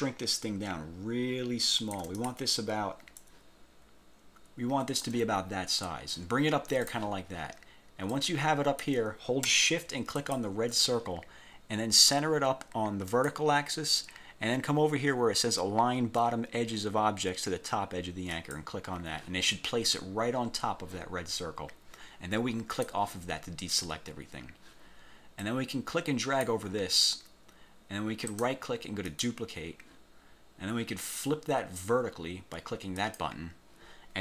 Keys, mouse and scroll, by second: 2.6-2.9 ctrl+shift+scroll up 2, 3.3-5.3 drag, 7.0 click, 8.3 click, 10.3 shift+click, 13.3 click, 18.5 click, 22.9 click, 25.5-26.7 drag, 28.4 click, 29.2 click, 33.1 click.